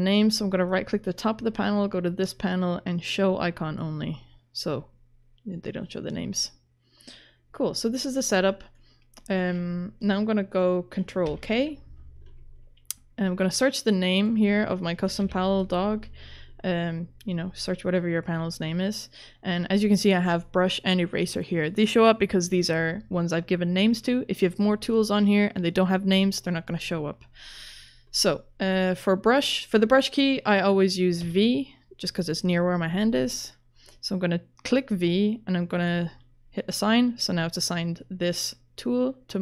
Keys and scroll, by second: 11.3 ctrl+k, 14.8-15.8 typing, 31.2 v.